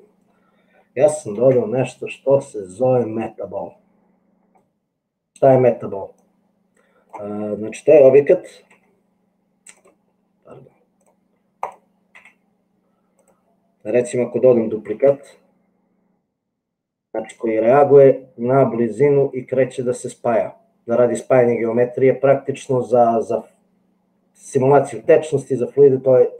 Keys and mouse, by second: 1.5 shift+a, 6.2-7.3 drag, 8.9 g, 11.7 click, 12.3 g, 15.0 shift+d.